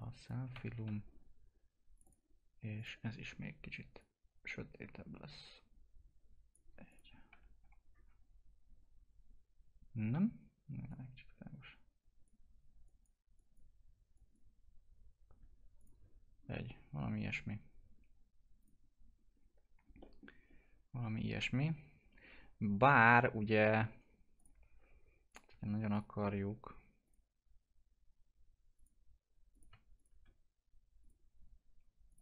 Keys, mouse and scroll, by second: 0.4 0, 1.9-6.9 drag, 7.3 F4, 8.0-9.1 scroll down 1, 10.9-12.8 drag, 16.4-18.1 scroll down 1, 18.6 click, 19.3-20.0 scroll up 1, 20.0 middle click, 20.4-21.6 scroll up 1, 22.9 F4, 24.4 click, 25.5 click, 25.9 shift+click, 27.0 click, 31.0 click.